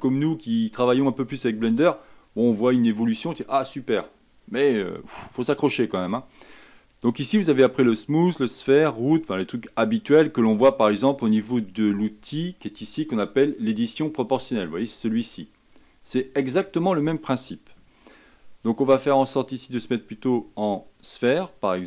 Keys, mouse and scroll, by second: 19.6-21.8 drag.